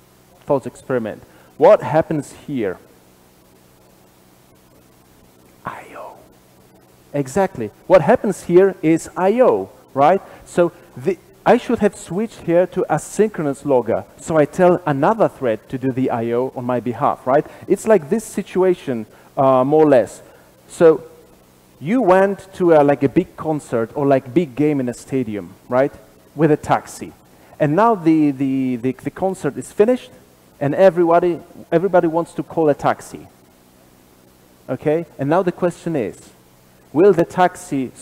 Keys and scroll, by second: 2.1 super+b.